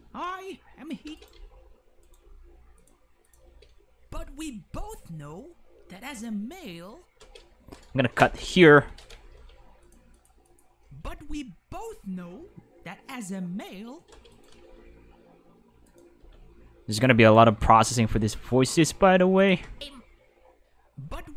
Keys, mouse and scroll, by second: 1.1 space, 1.1 right click, 1.3 x, 2.0 right click, 2.2 g, 2.8 click, 3.2 click, 3.5 space, 7.2 space, 8.2 k, 8.5 right click, 9.3 g, 9.8 click, 10.1 click, 10.5 click, 10.8 space, 14.1 space, 14.3 right click, 14.6 x, 15.8 right click, 16.2 g, 16.9 click, 17.2 right click, 17.3 g, 18.7 click, 19.4 click, 19.6 space.